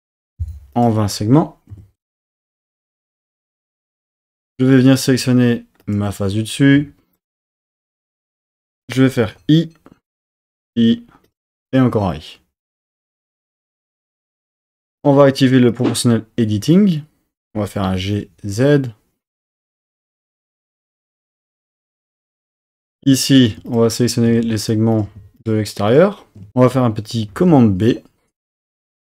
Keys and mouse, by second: 0.7-2.7 drag, 3.2 click, 3.6-5.2 drag, 5.2 3, 5.8 click, 9.3 i, 10.3 click, 10.6 i, 11.3 click, 13.3 click, 15.7 click, 17.8 g, 18.3 z, 22.4-23.4 drag, 23.4 typing, 24.9 click, 27.3 super+b.